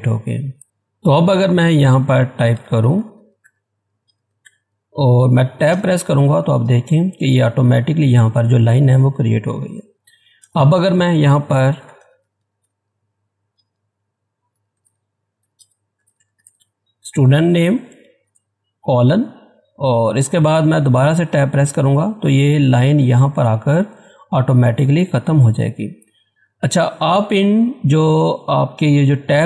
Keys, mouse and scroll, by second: 0.0 click, 0.6 ctrl+z, 1.8-4.9 typing, 5.7 Tab, 10.4 Tab, 10.4 Return, 11.5-17.1 typing, 18.2 shift+;, 21.3 shift+;, 22.5 Tab.